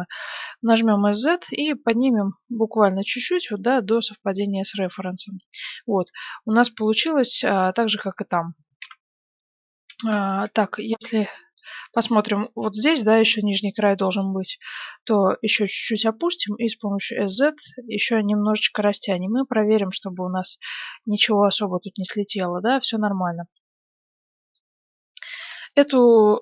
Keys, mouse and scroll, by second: 4.1 z, 5.8-7.7 middle drag, 8.8 KP_1, 9.6 z, 10.4 middle click, 11.1-12.1 drag, 14.2-15.8 drag, 16.3 s, 18.9 z, 19.4-21.4 middle drag, 25.4 KP_1, 26.0-26.4 middle drag.